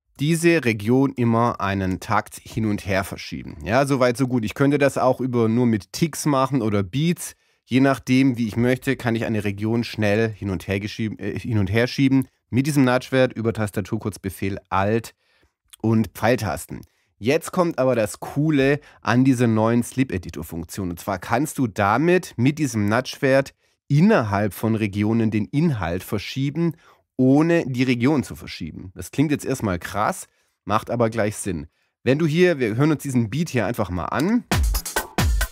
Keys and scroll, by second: 1.6 alt+Left, 9.7 alt+Right, 10.4 alt+Left.